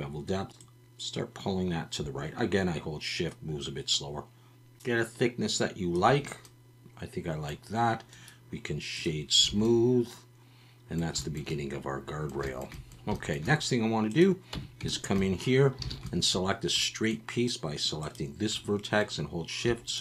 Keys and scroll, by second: 9.5 alt+a, 14.5 Tab, 15.8 alt+a.